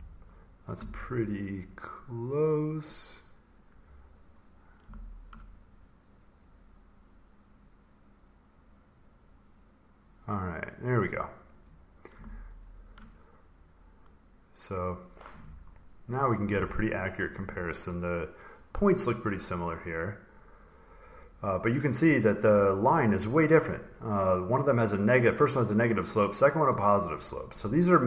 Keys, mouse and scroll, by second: 0.1 scroll, 2.2 click, 4.7 click, 4.9 ctrl+scroll, 6.8 ctrl+scroll, 7.4 click, 9.1 click, 10.4 click, 11.4 click, 12.5 ctrl+scroll, 14.6 click, 16.0 click, 16.8-18.4 ctrl+scroll, 19.4-20.1 scroll, 27.3 click.